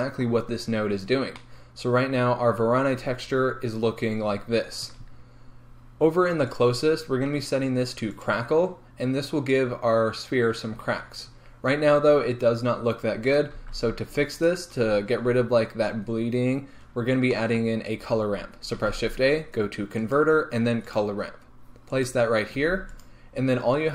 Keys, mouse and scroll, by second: 8.3-15.1 drag, 15.1 scroll up 1, 22.0 middle click, 22.0 shift+a, 22.2 click.